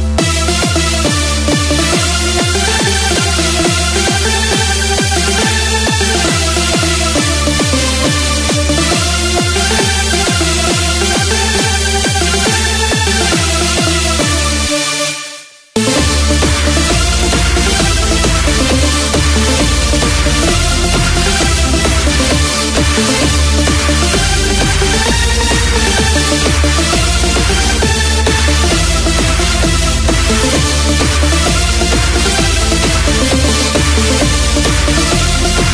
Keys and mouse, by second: 1.8-10.5 drag, 15.8 KP_1, 22.5 r, 26.5-27.9 drag, 27.9 KP_7, 34.5 r.